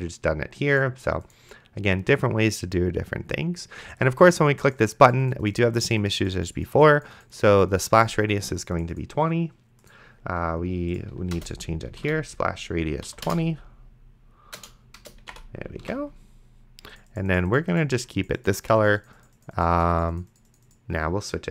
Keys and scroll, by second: 11.6 Return, 11.9 s, 12.3 p, 13.1 Down, 15.0-15.9 typing, 16.1 ctrl+s.